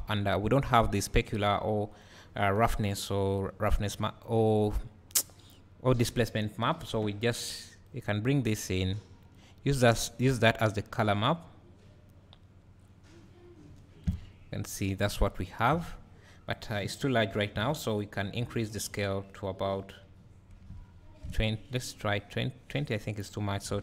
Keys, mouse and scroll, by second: 0.1 Delete, 2.9-5.4 drag, 7.9 click, 8.2-9.4 scroll up 1, 10.5-13.0 drag, 13.0-13.7 scroll up 2, 13.7 `, 14.2 scroll up 2, 14.3-16.6 drag, 14.8 scroll down 1, 15.1 `, 17.4 ctrl+t, 19.9-22.1 drag.